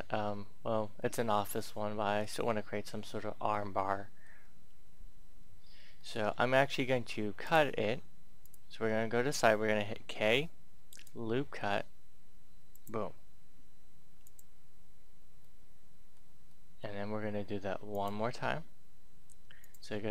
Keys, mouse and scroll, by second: 0.9 middle click, 1.1-3.5 scroll down 1, 3.5-4.8 middle drag, 7.3 click, 9.8 k, 10.8-13.8 drag, 15.4-17.8 middle drag, 17.9 click.